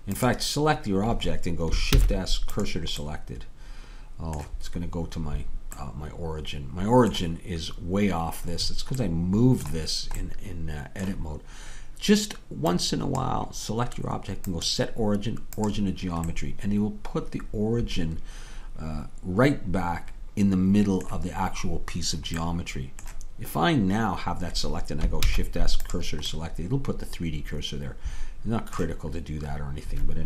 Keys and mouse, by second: 2.0 shift+s, 25.2 shift+s.